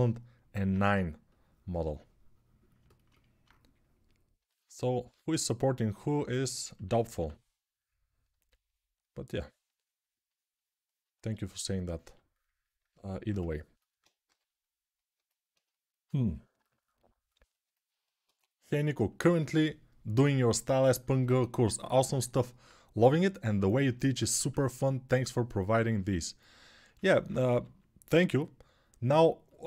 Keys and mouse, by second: 3.2-24.1 drag, 5.0 2, 6.5 1, 6.9 1, 14.0 g, 27.3 g.